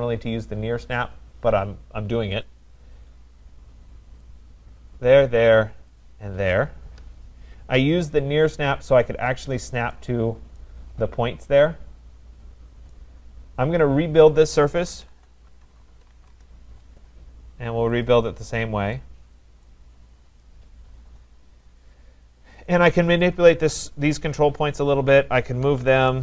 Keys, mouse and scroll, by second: 2.4 click, 4.2 click, 6.8 click, 6.9 Return, 8.7 click, 9.9 right click, 10.2 middle click, 10.2 middle click, 10.4 middle click, 12.9 right click, 14.8-16.6 typing, 15.1 scroll, 18.0 click, 19.7 right click, 20.0-20.3 scroll, 20.7-21.1 scroll, 21.0 typing, 21.5-21.8 scroll, 22.6 click, 23.3 click, 24.9 shift+click, 25.4-26.2 typing.